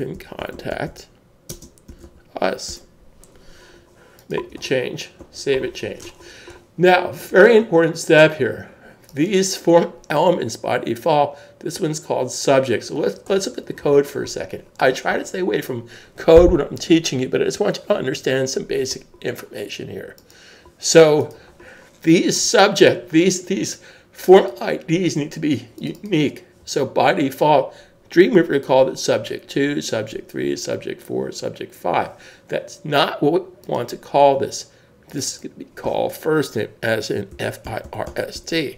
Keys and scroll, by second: 0.0-2.9 typing, 2.7 Return, 5.7 super+s, 37.3-38.7 typing.